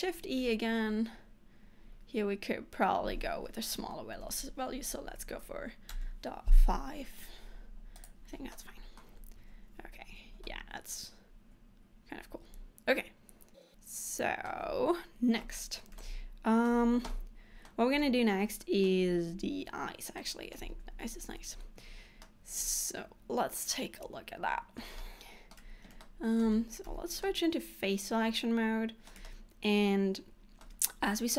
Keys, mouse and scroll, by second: 0.3 shift+e, 8.2 click, 8.6 middle click, 9.2 Tab, 9.9-10.5 scroll down 3, 10.6 middle click, 15.7 scroll up 1, 16.1 shift+middle click, 17.3 middle click, 18.1 middle click, 18.1 scroll up 1, 20.5 middle click, 20.9 Tab, 21.9-22.3 scroll down 1, 22.3 middle click, 25.1 shift+middle click, 26.1 shift+scroll up 1, 26.1 shift+middle click, 27.0 3, 27.3 middle click, 29.3 shift+middle click.